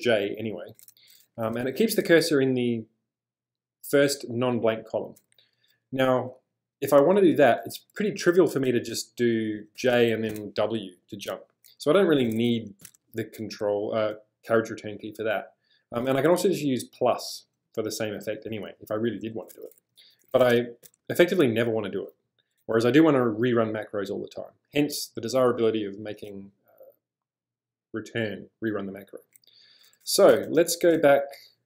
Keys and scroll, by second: 1.6 j, 2.0 w, 6.7-7.3 typing, 8.3-10.8 typing, 12.8 g, 13.0 g, 20.0-21.5 typing, 29.9-31.1 typing.